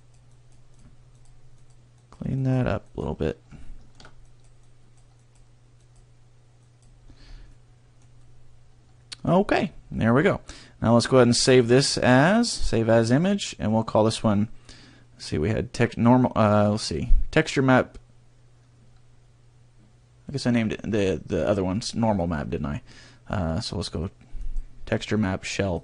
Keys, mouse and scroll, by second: 0.0 click, 0.2 click, 0.7 click, 1.1 click, 1.6 click, 2.0 click, 2.4 click, 2.8 click, 3.6 shift+middle click, 4.2 click, 4.6 click, 5.2 click, 5.8 click, 6.6 click, 7.0-7.4 scroll down 4, 7.4 middle click, 8.1 middle click, 11.4 click.